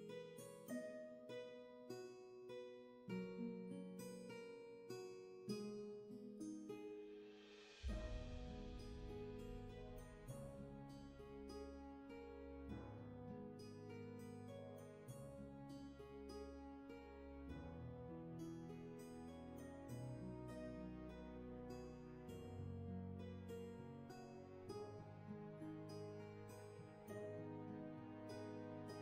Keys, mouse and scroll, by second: 3.8 ctrl+z, 5.9 ctrl+z, 24.5 ctrl+z, 28.2 ctrl+z.